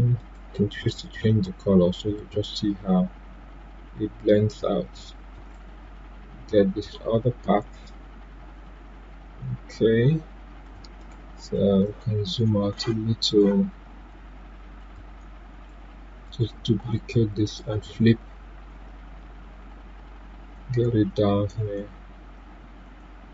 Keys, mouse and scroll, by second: 0.1 right click, 1.9-5.3 drag, 5.3 ctrl+right click, 10.6 ctrl+right click, 10.6 click, 11.1 right click, 11.8-13.2 drag, 14.7 shift+click, 16.2 right click, 17.4-23.3 drag.